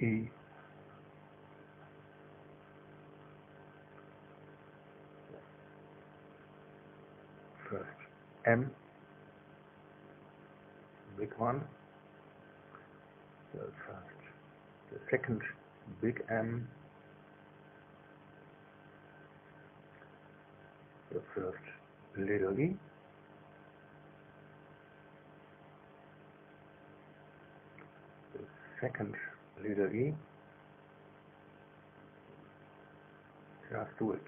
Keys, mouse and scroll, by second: 0.5 click, 2.1 KP_0, 2.2 KP_Decimal, 2.5 KP_0, 2.6 KP_1, 2.9 KP_Enter, 8.2 space, 9.1 click, 10.2 click, 11.1 click, 11.9 KP_0, 12.2 KP_Decimal, 12.3 KP_0, 12.6 KP_1, 12.8 KP_Enter, 12.8 click, 14.7 space, 15.6 click, 16.7 click, 18.1 click, 19.2 KP_0, 19.3 KP_Decimal, 19.5 KP_0, 19.7 KP_1, 19.9 KP_Enter, 21.8 space, 23.3 click, 24.4 click, 26.0 click, 26.8 KP_0, 27.0 KP_Decimal, 27.2 KP_0, 27.4 KP_1, 27.6 KP_Enter, 29.1 space, 30.2 click.